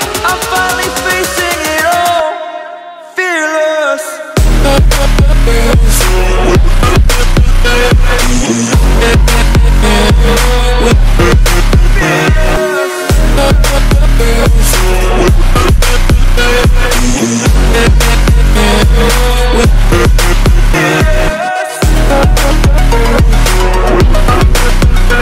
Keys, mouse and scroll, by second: 1.4 click, 2.8-3.7 typing, 4.6 click, 4.9-5.2 scroll down 1, 5.8-12.4 drag, 12.8 click, 13.1 click, 13.8-15.7 scroll up 1, 17.1 click, 17.4-18.1 scroll up 1, 18.1 click, 20.5 scroll down 1, 21.6-22.1 scroll up 1, 22.1 right click, 22.7 click, 23.8-24.2 scroll down 1, 24.2 click, 24.8 scroll up 1.